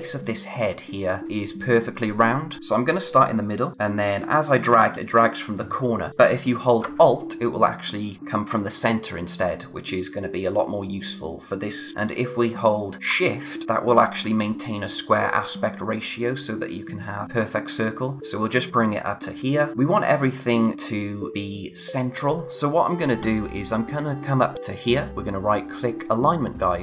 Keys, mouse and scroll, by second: 2.6 z, 3.7 click, 19.7-20.3 scroll up 1, 24.8 right click, 25.8 click.